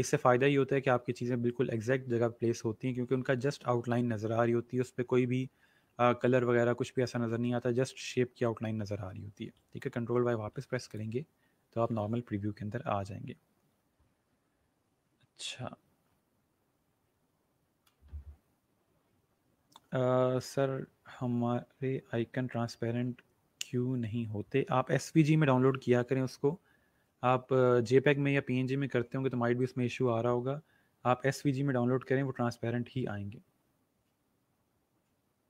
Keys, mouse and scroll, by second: 3.3 ctrl+y, 10.2 ctrl+y, 10.8 click.